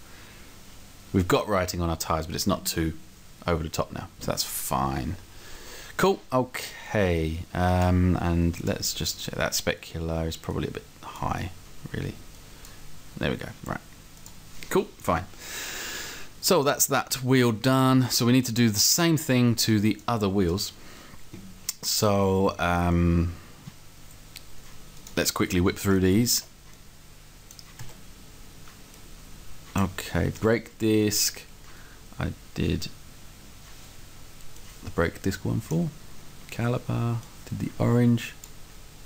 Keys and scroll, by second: 26.3 s.